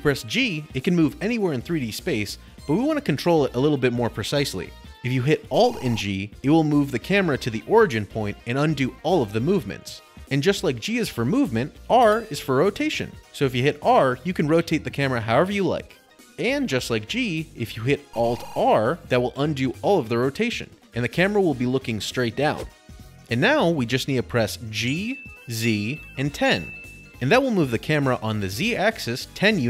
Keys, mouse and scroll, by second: 3.4 Escape, 3.4-4.2 drag, 7.1 alt+g, 8.5 middle click, 8.7 middle click, 11.6 middle click, 13.8 r, 17.1 Escape, 19.0 alt+r, 22.5-26.3 middle click, 22.9-23.3 scroll, 24.2 g, 25.2-26.6 typing.